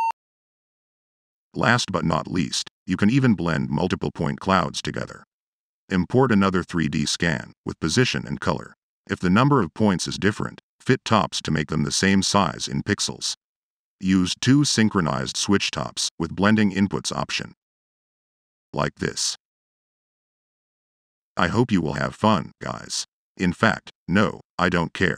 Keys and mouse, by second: 2.1-2.9 drag, 7.1 click, 8.8-9.3 drag, 9.9 click, 13.6 click, 15.0 click, 16.4-23.8 drag.